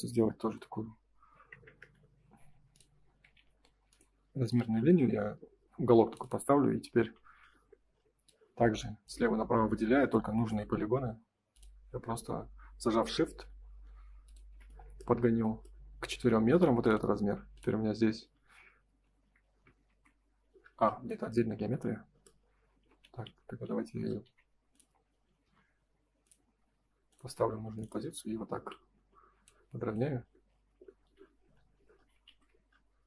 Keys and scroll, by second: 1.8 Return, 3.3 ctrl+z, 4.5 space, 15.0 space, 16.3 Escape, 19.9 shift+f, 22.8 ctrl+z, 24.2 Escape, 27.3 space, 31.0 F3, 32.2 shift+f.